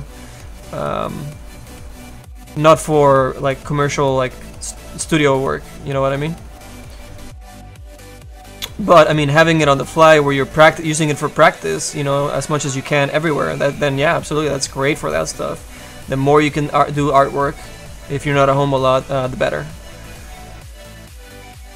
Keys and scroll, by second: 15.8 s.